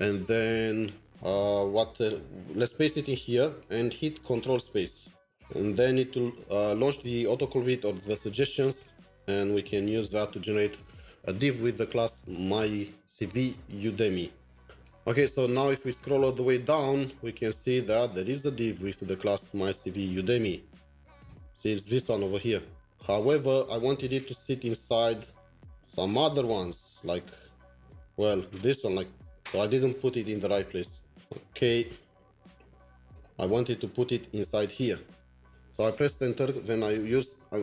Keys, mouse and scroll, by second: 2.3 Return, 2.6 typing, 4.6 ctrl+space, 8.8 ctrl+s, 12.2 ctrl+s, 15.5-16.3 scroll down 16, 17.4-18.2 scroll down 1, 25.3-26.0 scroll down 1, 31.9-33.4 scroll up 1, 34.5-36.3 scroll up 1.